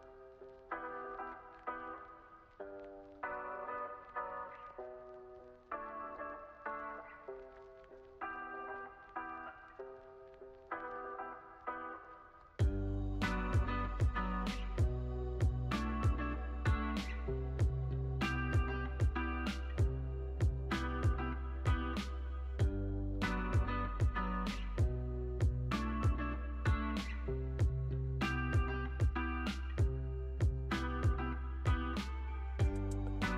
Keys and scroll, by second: 0.0 u, 2.9 super+c, 3.1 super+v, 3.6 x, 4.7 super+v, 5.4 x, 6.0 super+s, 21.8 super+s, 26.9 u, 31.4 F9.